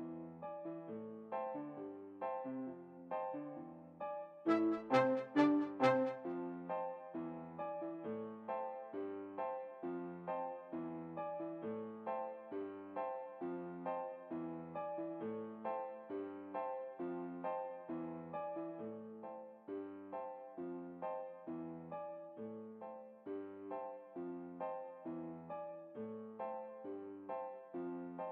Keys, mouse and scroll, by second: 1.6 m, 1.9 right click, 2.6 n, 3.5-5.3 middle drag, 4.6-6.1 drag, 6.1-7.3 middle drag, 12.8-14.3 drag, 15.8 l, 17.9 Tab, 18.9-20.4 drag, 23.3 l, 24.8 n, 25.2-27.3 middle drag, 26.8 Tab, 27.5 click, 27.8-28.3 middle drag, 28.2-28.3 right drag.